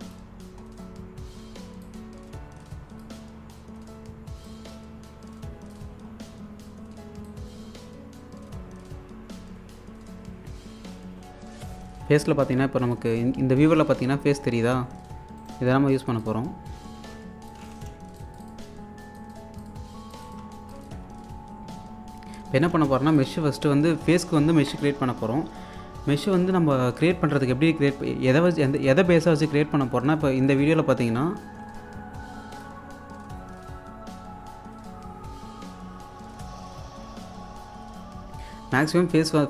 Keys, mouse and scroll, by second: 0.4 scroll down 1, 1.9-3.2 drag, 3.2-3.6 scroll down 1, 6.1 scroll down 1, 7.3-13.4 drag, 13.4-14.3 scroll up 1, 15.4 right click, 16.2 click, 17.5 click, 18.6 1, 19.2 click, 19.4 1, 19.6 click, 20.4 1, 20.6 scroll down 1, 20.8 alt+click, 21.1-22.1 scroll up 1, 22.7 scroll up 1, 22.9 space, 23.1 alt+click, 23.7-24.6 scroll up 1, 31.6 q, 32.6 click, 38.8-39.4 drag.